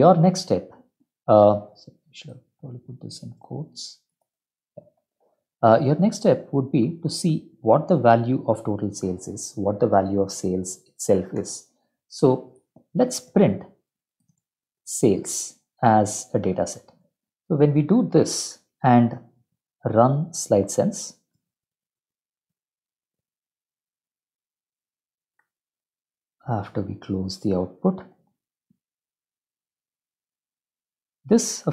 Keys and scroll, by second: 0.1 Up, 1.6 ctrl+Right, 2.3 ', 2.7 End, 3.1 ctrl+z, 3.4 shift+', 3.7 End, 4.1 Left, 4.3 shift+', 4.9 Delete, 5.2 Escape, 5.5 ctrl+End, 5.9 Up, 6.1 Up, 6.3 End, 11.4 Return, 11.8 Tab, 12.2 Tab, 12.5-15.6 typing, 18.9 ctrl+s, 18.9 F12, 19.5 Up, 27.9 Up, 28.1 Return.